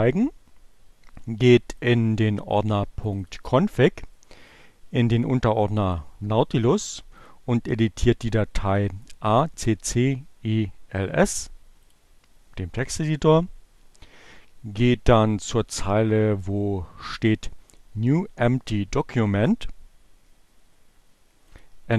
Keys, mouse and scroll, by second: 1.1 click, 5.3 click, 7.0 click, 11.3 right click, 11.9 click, 21.3 click, 21.7 Delete.